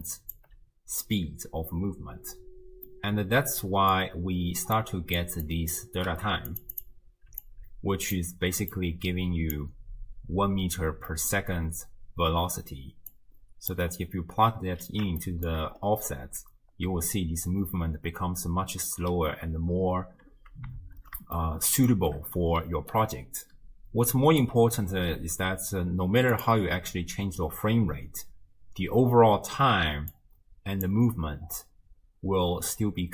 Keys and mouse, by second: 0.3 d, 0.4 d, 0.5 d, 2.9 click, 2.9 right click, 3.5 middle click, 4.8-5.2 drag, 5.5 click, 6.1 g, 7.4 alt+click, 8.7-9.6 drag, 9.9-10.7 d, 11.1 click, 13.2-13.8 drag, 15.3 shift+click, 16.3 space, 20.1 space, 20.8 shift+space, 21.5-22.0 shift+drag, 22.6 d, 22.9-24.5 drag, 24.5 d, 26.5-28.3 drag, 30.1 click.